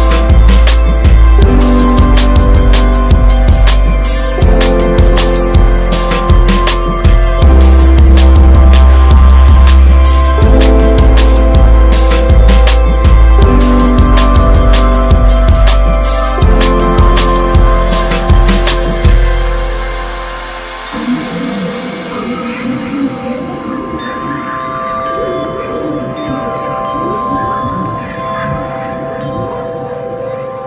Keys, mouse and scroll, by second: 0.4 click, 0.6 scroll down 1, 0.8-1.3 middle drag, 1.3 ctrl+s, 1.7 click, 2.1-2.6 shift+middle drag, 2.6 Tab, 2.8 click, 3.4 Tab, 3.5 click, 3.8 Tab, 4.2 click, 4.7 l, 5.0 middle click, 5.2-6.5 scroll up 3, 6.5-11.8 drag, 11.8 F4, 25.2-26.0 drag, 27.3 click, 27.7 middle click, 28.1 Tab, 28.3 drag, 28.5 scroll down 2, 28.7-30.6 middle drag.